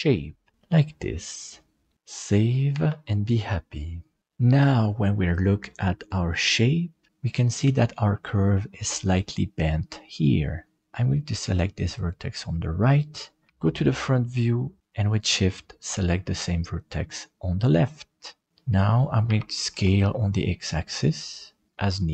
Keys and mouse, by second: 2.8 ctrl+s, 11.9 right click, 13.5 KP_1, 16.3 shift+right click, 16.7 shift+right click, 19.3 s, 21.7 middle click.